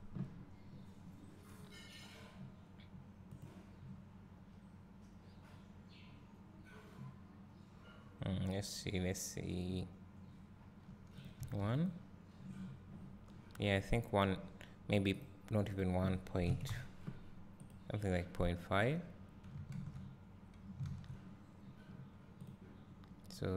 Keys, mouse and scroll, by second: 0.9-1.9 scroll down 1, 12.0 click, 13.4-14.1 scroll up 1, 15.2 click, 17.9 click, 20.9 alt+a, 22.5 click.